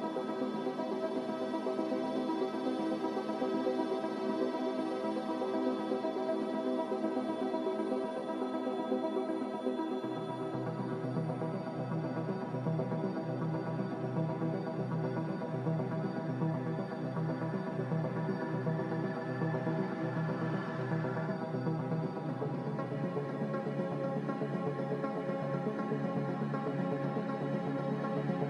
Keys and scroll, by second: 10.2 Delete.